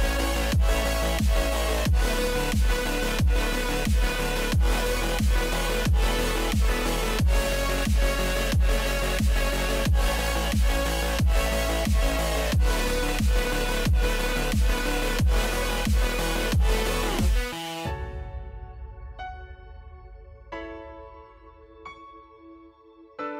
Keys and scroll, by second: 12.1 ctrl+-, 12.3 ctrl+z, 16.3 ctrl+z, 17.4 ctrl+-, 17.5 ctrl+z, 17.7 ctrl+-, 19.9 ctrl+z.